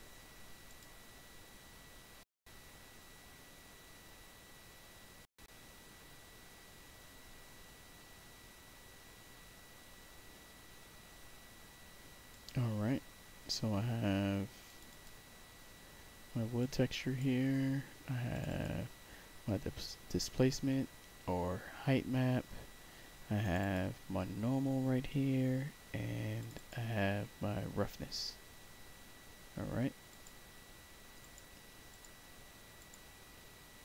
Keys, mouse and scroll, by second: 0.6 click, 12.2 click, 14.6 click, 14.8 click, 16.5 click, 18.2 click, 18.4 click, 23.3 click, 23.5 click, 26.3 click, 26.5 click, 30.0 click, 31.1 click, 31.8 click, 32.7 click.